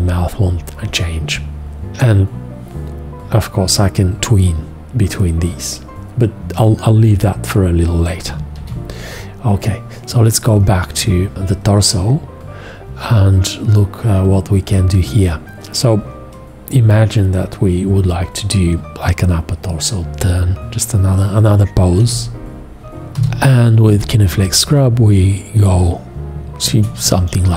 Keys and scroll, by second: 8.6 shift+x, 22.0 x, 23.2 g.